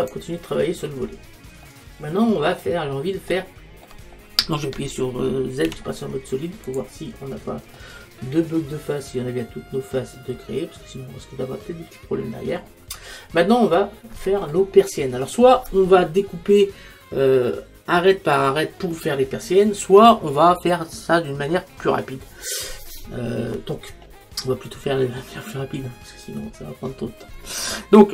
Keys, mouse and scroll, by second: 0.0-1.7 right drag, 0.7-5.1 middle drag, 1.7-3.3 drag, 5.7 z, 7.2-9.2 middle drag.